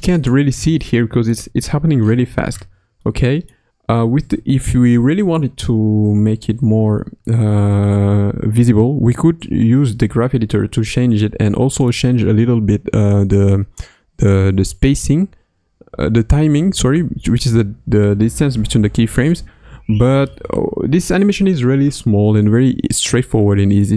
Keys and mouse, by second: 0.0 ctrl+Tab, 0.0 click, 3.0 middle click, 11.8 click.